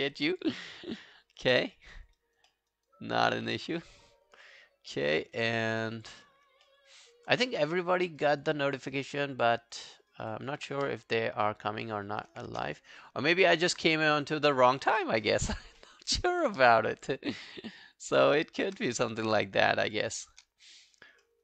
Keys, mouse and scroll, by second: 0.2 alt+scroll down 1, 0.4 alt+click, 0.8 alt+middle click, 1.2 alt+scroll down 1, 1.4 alt+click, 1.9 alt+middle click, 2.2 alt+right click, 2.5 alt+middle click, 2.7 alt+right click, 3.3 alt+right click, 3.6 alt+click, 6.4-6.8 scroll down 2, 6.7 alt+middle click, 6.9 alt+right click, 7.1 alt+click, 7.5 q, 7.7 right click, 8.7 double click, 9.0 alt+scroll down 1, 9.2 alt+click, 9.9 alt+middle click, 10.1 alt+scroll down 1, 10.1 alt+right click, 10.3 alt+click, 10.8 q, 10.9 right click, 12.1 alt+click, 12.8 alt+click, 14.2 alt+middle click, 14.4 alt+right click, 14.6 alt+click, 15.8 alt+middle click, 16.1 alt+right click, 16.3 alt+click, 16.7 shift+click, 17.0 shift+click, 19.0 alt+click, 19.9 shift+click, 20.3 shift+click, 20.6 alt+click, 21.2 alt+middle click.